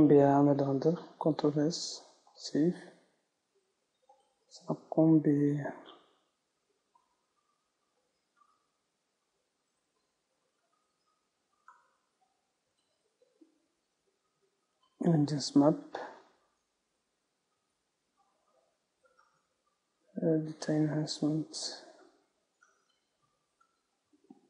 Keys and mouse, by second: 0.2 z, 2.1 ctrl+s.